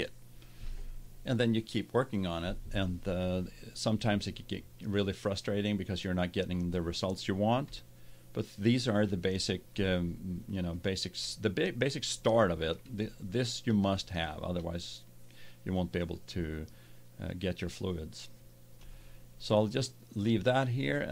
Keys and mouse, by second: 5.8-9.7 middle drag, 9.9 middle click, 12.0-13.2 middle drag, 15.9-21.1 middle drag.